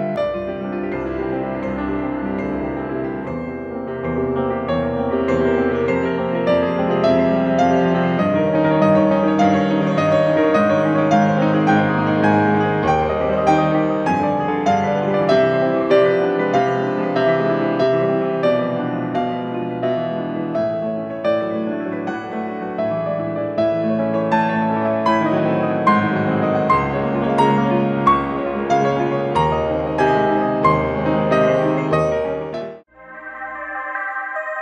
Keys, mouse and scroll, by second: 0.0-2.6 drag, 2.6-3.0 scroll down 1, 3.0-4.0 scroll up 1, 4.0 scroll up 1, 6.9-12.4 middle drag, 17.6-18.0 scroll up 2, 18.0-18.9 scroll down 2, 18.9 scroll down 1, 34.5 Escape.